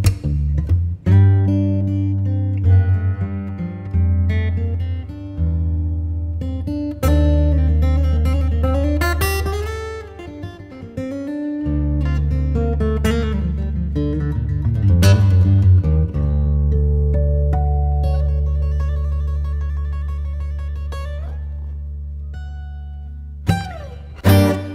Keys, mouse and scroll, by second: 1.6 scroll up 1, 2.5 ctrl+shift+click, 5.3 Return, 6.8 click, 7.3 right click, 8.4 ctrl+shift+click, 10.4 right click, 12.2 click, 12.6 Tab, 13.7 right click, 14.2 scroll down 1, 14.4 scroll up 1, 14.6-16.4 right drag, 16.4 Tab, 17.3-17.9 scroll up 1, 18.1 ctrl+shift+click, 24.2 scroll down 1, 24.4 right click.